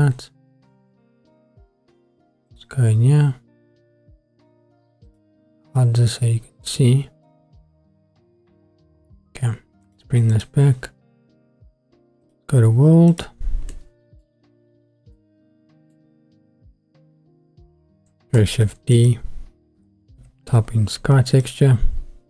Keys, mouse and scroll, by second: 0.5-1.2 scroll up 3, 1.2-2.8 scroll down 1, 2.8 click, 5.1-10.6 drag, 12.2-13.3 drag, 13.7 middle click, 14.6-15.1 scroll up 3, 15.1 middle click, 16.3-16.9 scroll up 1, 16.9-17.8 scroll up 1, 18.6 shift+a.